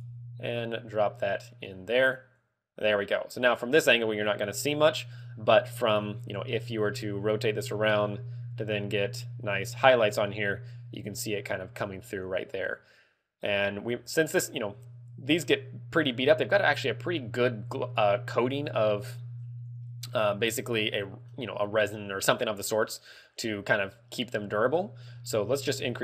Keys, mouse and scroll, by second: 0.1 click, 0.7 click, 2.5 click, 7.0 middle click, 20.3 middle click, 22.7 middle click, 25.7 ctrl+click.